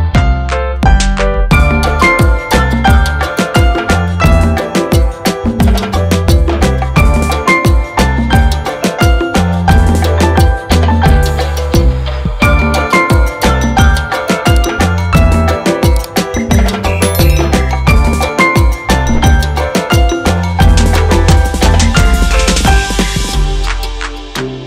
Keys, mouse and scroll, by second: 1.7 click, 2.8 click, 3.4 double click, 4.2 click, 7.7 click, 8.7 click, 8.8 double click, 9.8 click, 11.3 double click, 12.0 ctrl+click, 12.9 ctrl+r, 13.4 click, 15.7 ctrl+r, 16.1 click, 17.3 click, 18.2 ctrl+o, 19.0-20.1 scroll down 1, 20.1 click, 24.0 F4.